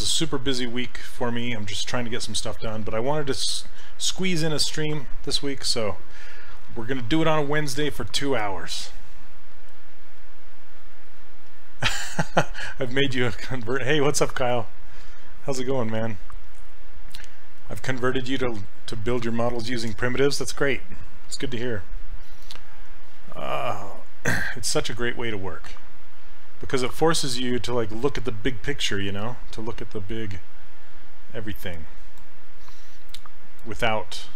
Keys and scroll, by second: 15.8 s, 26.7 s, 31.7 s.